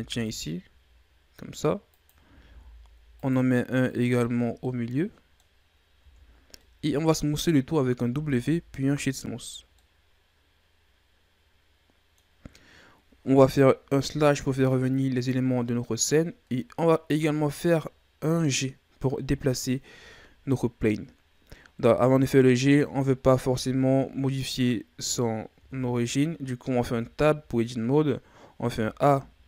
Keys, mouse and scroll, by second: 2.4 ctrl+r, 4.4 scroll down 2, 4.6-5.6 middle drag, 5.6-6.0 scroll up 2, 6.0 Tab, 6.6-8.0 middle drag, 8.0 w, 9.6 scroll down 1, 9.8-12.9 middle drag, 13.9 KP_Divide, 23.1-24.9 scroll up 13, 24.9-25.5 scroll down 6, 25.7-26.3 scroll down 5, 26.3-26.8 scroll up 1, 26.8 Tab, 28.6 a, 29.0 a.